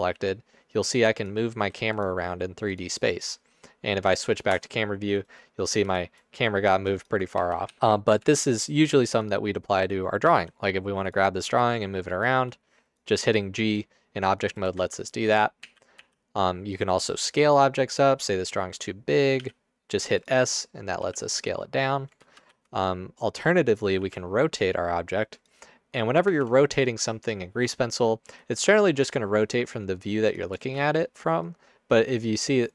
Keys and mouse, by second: 0.2 g, 1.7 g, 2.3 g, 4.5 KP_0, 5.8 g, 7.5 ctrl+z, 7.7 ctrl+z, 7.7 ctrl+z, 8.3 ctrl+z, 10.4 g, 11.5 g, 12.5 g, 13.4 g, 14.8 ctrl+z, 15.3 ctrl+z, 15.7 ctrl+z, 16.2 ctrl+z, 19.5 s, 21.2 s, 22.3 ctrl+z, 22.7 ctrl+z, 24.0 r, 26.3 ctrl+z, 28.8 r, 30.3 click, 30.8 ctrl+z.